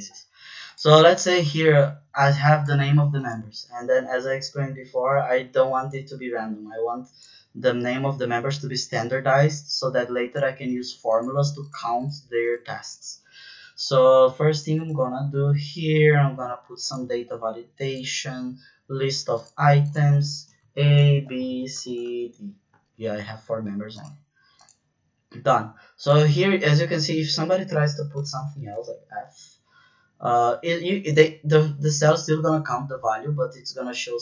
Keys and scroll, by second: 20.3-22.5 typing, 27.1 shift+d, 28.1 BackSpace, 28.5 shift+f, 28.7 Return.